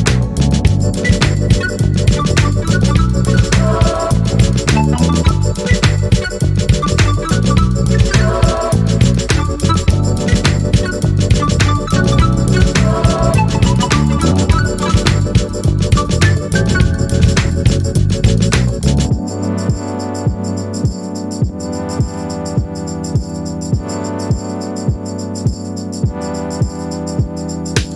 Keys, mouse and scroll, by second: 0.6 click, 3.0 click, 5.1 click, 7.1 ctrl+a, 8.3 click, 9.9-11.1 drag, 11.6-13.3 shift+drag, 14.1 click, 15.3 click, 16.8 KP_5, 19.7-20.3 ctrl+scroll up 2, 20.7 ctrl+click, 22.0-23.3 drag, 23.7 Delete, 24.8 click, 25.8 KP_5, 27.5 click.